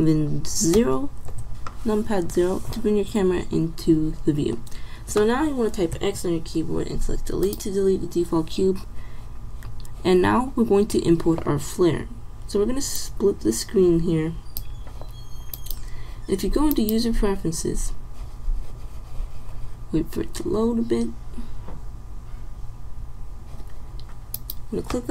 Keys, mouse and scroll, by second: 0.9 ctrl+alt+KP_0, 6.0 x, 13.0 click.